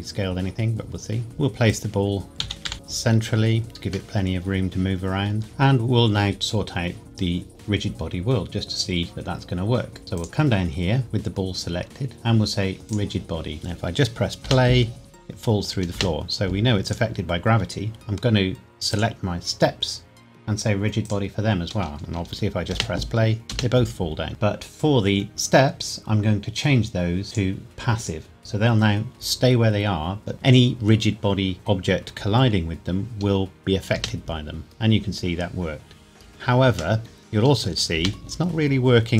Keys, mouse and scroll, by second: 1.2-1.7 scroll down 1, 1.7 click, 2.4 g, 2.6 y, 3.7 click, 4.1 middle click, 5.4 click, 10.2 click, 12.8 click, 14.4 space, 16.8 click, 18.9 click, 22.7 space, 24.3 click, 27.2 click, 33.9 space, 37.0 middle click, 38.0 space.